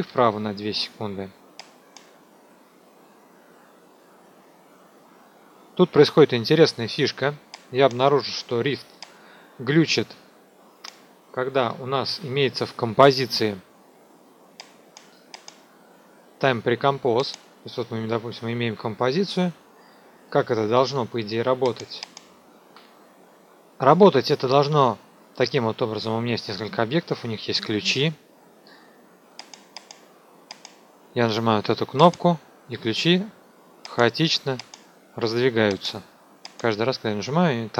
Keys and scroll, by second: 0.0 KP_2, 22.3 ctrl+alt+shift+t, 22.7 F2.